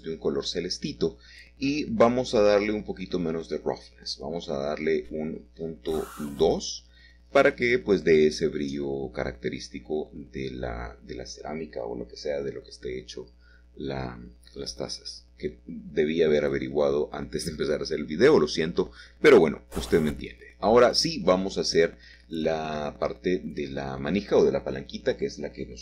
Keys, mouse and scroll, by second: 2.7-4.3 scroll down 2, 4.5-5.6 drag, 8.0-8.9 scroll up 1, 8.9-11.0 middle drag, 13.3 Caps_Lock, 15.6 shift+middle click, 18.4-19.8 scroll down 1, 19.8 shift+a, 23.1 Tab, 24.1 a, 25.0 a.